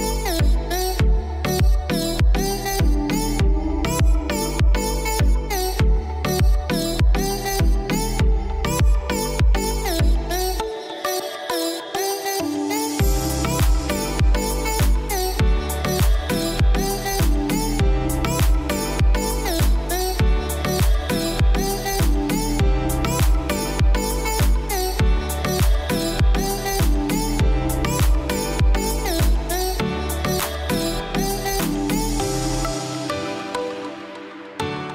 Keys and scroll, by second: 14.0 ctrl+j, 20.5 ctrl+i.